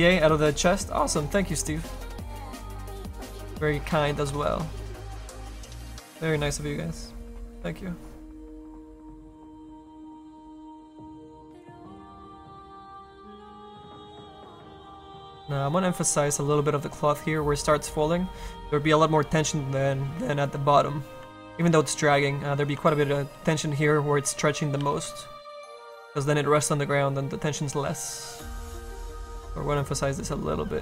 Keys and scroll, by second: 25.6 s.